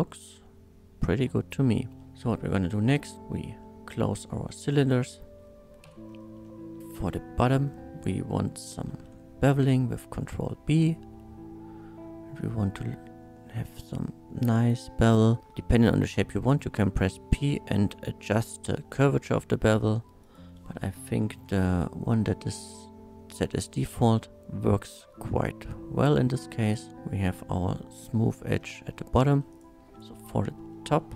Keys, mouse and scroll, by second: 1.9 shift+middle click, 2.0 alt+2, 2.8 middle click, 3.1 f, 3.6 middle click, 4.8 alt+click, 5.8 f, 6.4 middle click, 6.9 3, 7.0-8.0 scroll up 1, 8.9 ctrl+b, 16.7 p, 19.3 p, 20.2 right click, 21.2 ctrl+b, 23.3-23.9 scroll up 1, 26.6 click, 27.0 Tab, 27.0-28.0 middle drag, 28.2 scroll up 1, 28.9 middle drag, 29.5 click, 29.9 Tab, 29.9 click, 29.9 3, 30.7 middle click.